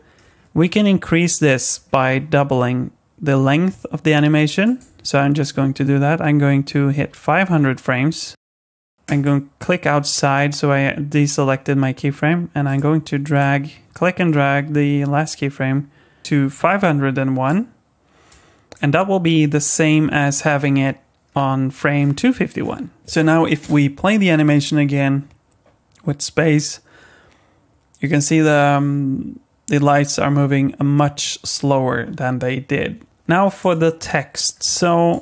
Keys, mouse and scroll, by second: 4.6 click, 4.6 scroll down 1, 7.4 KP_0, 8.9 ctrl+z, 9.0 click, 12.6 click, 13.4 click, 16.2 click, 18.3 click, 20.4-21.9 scroll down 12, 21.9-22.6 scroll down 11, 22.6-23.0 scroll down 11, 23.0 click, 23.6 space, 33.1 click, 33.1 space, 33.6 click, 34.4 scroll down 2, 34.8 middle click.